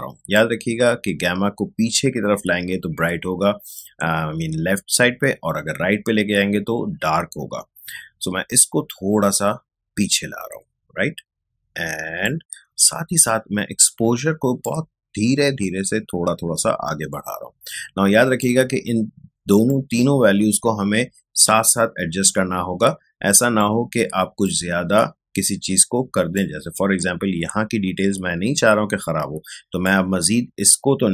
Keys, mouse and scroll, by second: 3.7-13.7 drag, 14.6-29.8 drag, 29.8-31.1 drag.